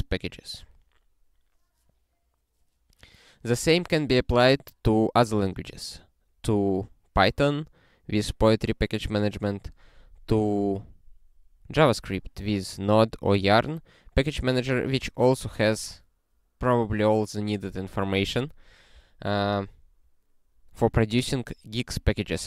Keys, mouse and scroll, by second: 19.0 click.